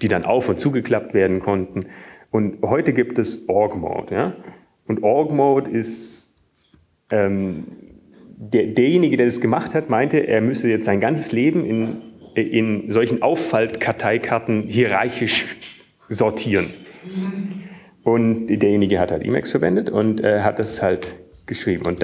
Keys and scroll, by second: 5.9-6.4 Down, 6.8 Down, 6.9 Down, 8.3 Down, 9.3 Up.